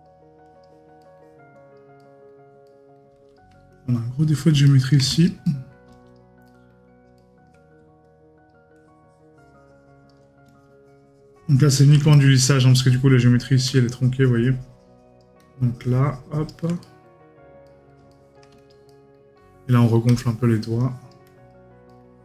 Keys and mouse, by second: 1.0 right click, 4.7 right click, 16.8 right click, 21.9 right click.